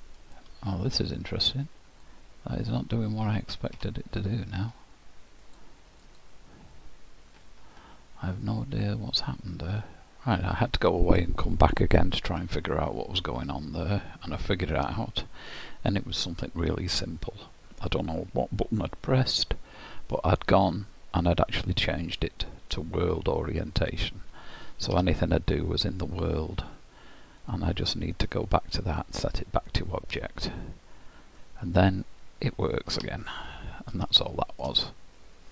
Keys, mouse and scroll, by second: 0.2 click, 1.3 click, 4.8-5.4 scroll down 6, 5.4 click, 6.0 click, 6.7-8.0 scroll up 4, 8.3-9.0 scroll up 7, 9.0-10.1 scroll up 3.